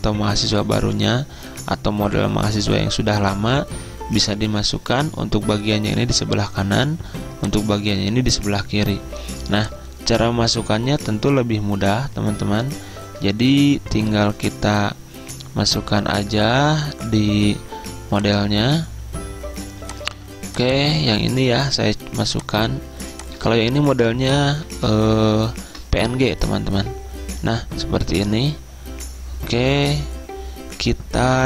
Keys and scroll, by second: 26.2 alt+Tab, 28.0 Return, 29.3 Return.